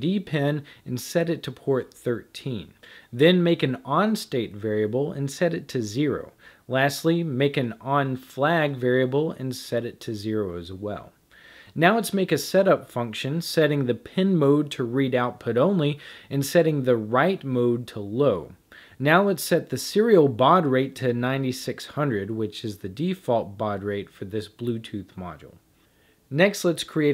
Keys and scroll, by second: 1.1-7.5 typing, 8.6-9.6 typing, 11.8-22.5 typing, 23.6 Down, 25.2-27.1 typing.